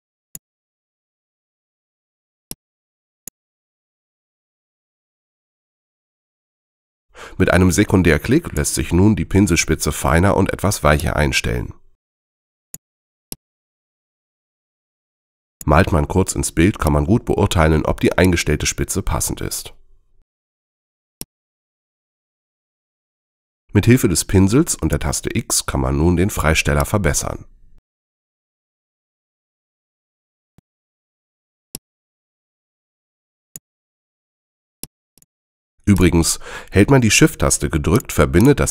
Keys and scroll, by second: 2.3 space, 5.7 b, 19.7 super+z, 25.2 x, 31.5 space.